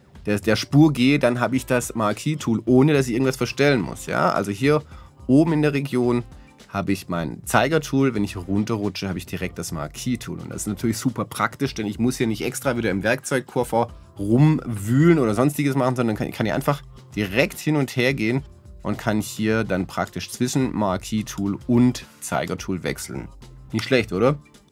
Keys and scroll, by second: 23.8 super+z.